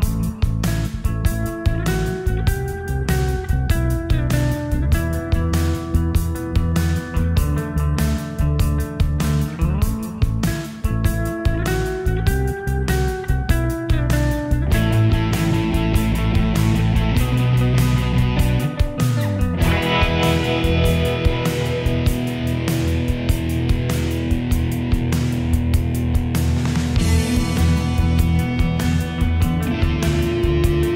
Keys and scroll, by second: 10.0 ctrl+v.